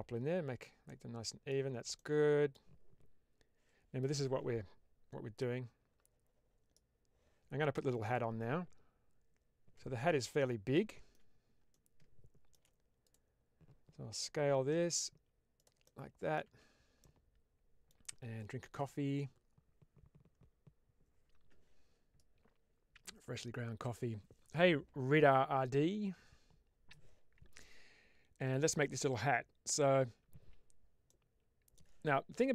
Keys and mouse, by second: 0.7-1.4 middle drag, 1.9-2.4 middle drag, 10.2-11.1 middle drag, 11.6-12.4 shift+middle drag, 14.6 s, 15.7 middle click, 16.9 Tab, 16.9 middle click, 31.0 middle click.